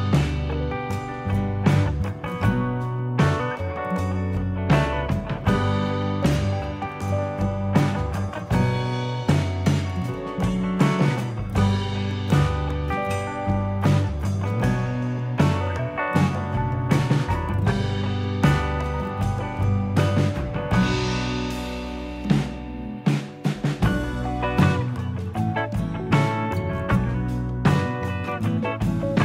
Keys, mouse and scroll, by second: 0.3 click, 1.9 middle click, 2.6 middle click, 3.0 shift+click, 5.3 middle click, 6.5 click, 8.1 click, 10.6 click, 11.0 middle click, 15.7 scroll up 3, 16.1 middle click, 17.6 click, 21.7 middle click, 22.7 shift+middle click, 23.2 middle click, 24.7 Tab, 25.3-26.3 scroll up 3, 26.3 click, 27.9 click.